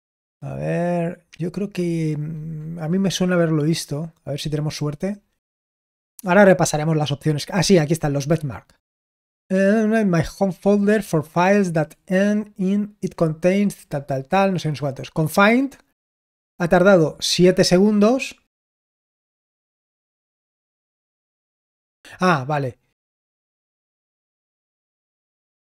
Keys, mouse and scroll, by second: 1.1-4.0 scroll down 1, 4.0-6.3 scroll down 1, 6.3-7.6 scroll down 1, 7.6-13.6 scroll up 1, 13.6-16.1 scroll down 1, 16.1-21.0 scroll down 1, 21.0-25.6 scroll down 1.